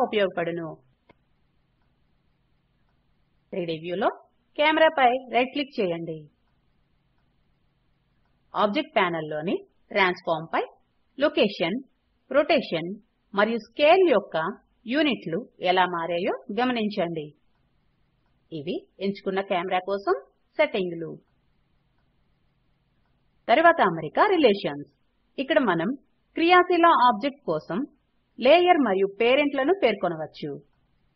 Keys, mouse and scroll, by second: 1.4 right click, 1.9 right click.